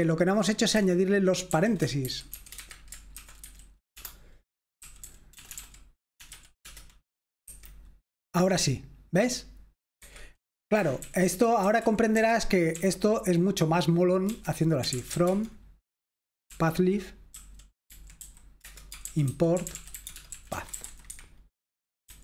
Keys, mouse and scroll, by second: 0.7-6.3 typing, 2.5 Escape, 6.6 Return, 7.4 F5, 10.0 Escape, 10.7-11.4 typing, 12.5-13.2 typing, 14.2-15.6 typing, 16.7-22.2 typing.